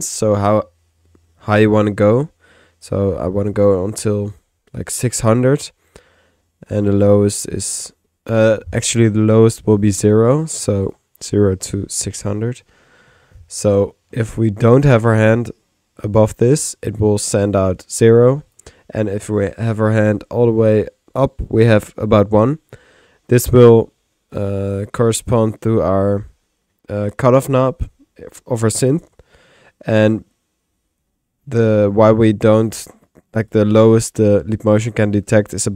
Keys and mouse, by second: 9.7 click, 10.7 click, 14.1 middle click, 14.8 click, 16.4 click, 17.3-18.7 drag, 33.3 typing, 33.5 click, 34.3-35.7 drag.